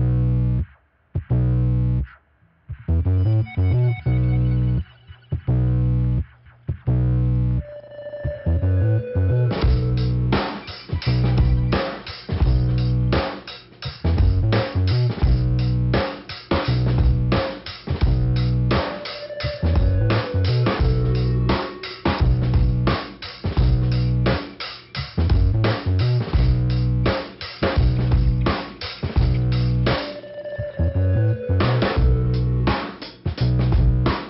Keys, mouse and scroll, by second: 1.1 click, 1.5 click, 1.6 double click, 2.3 double click, 3.2 click, 3.6 click, 3.8 click, 4.0 double click, 4.4 double click, 4.8 double click, 5.4 click, 6.6 click, 7.4 click, 8.6 click, 13.0 scroll down 2, 16.5 scroll up 2, 17.3 click, 17.5 scroll up 1, 17.6 click, 18.2 click, 18.8 click, 22.4 click, 26.2 middle click, 27.6-28.3 scroll down 2, 28.3 click, 29.0 click, 29.1 click, 29.7 click, 31.3 click, 32.3 click, 33.4 click, 34.0 click.